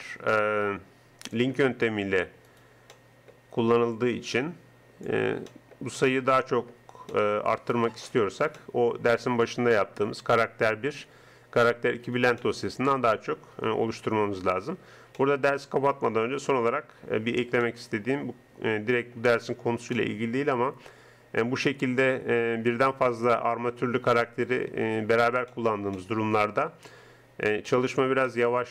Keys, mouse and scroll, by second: 0.3 middle click, 1.0 click, 1.0 right click, 1.2 middle click, 2.1 middle click, 2.5-4.2 right drag, 4.2-5.3 middle drag, 5.5 middle click, 14.2 middle click, 19.3 middle click, 21.8 middle click, 23.8-26.2 middle drag.